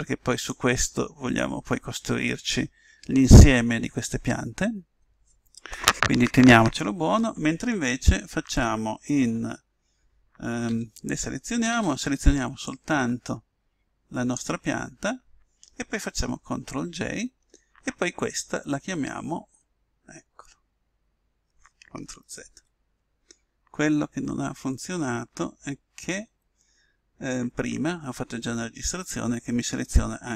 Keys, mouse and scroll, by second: 0.4 click, 10.8 a, 11.7 b, 16.6 ctrl+j, 19.0-25.6 middle drag, 22.5 ctrl+z.